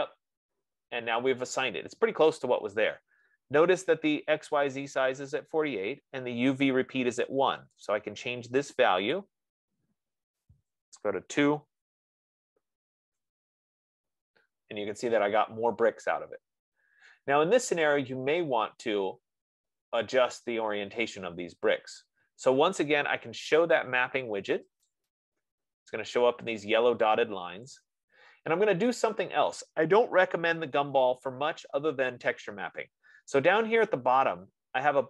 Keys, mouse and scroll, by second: 0.0 click, 8.1 click, 9.4 click, 11.0 typing, 13.5 Tab, 16.6 F15, 25.4 click, 26.4-30.2 drag.